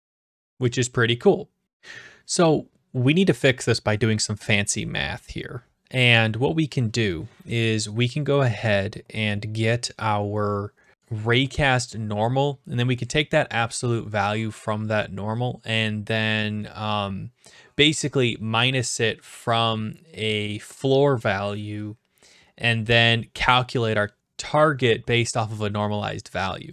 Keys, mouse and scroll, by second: 0.7 click.